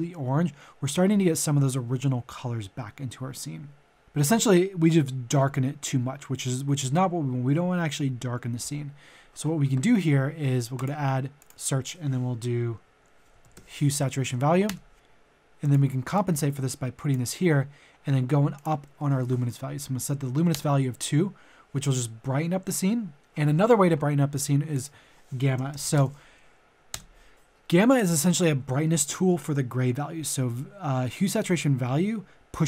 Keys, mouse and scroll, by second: 10.7-12.4 drag, 13.3-14.0 typing, 14.6 Return, 15.6-17.8 drag, 19.0 click, 20.5 Return, 24.3 click, 25.3-25.9 typing, 26.9 Return, 27.9-32.6 drag.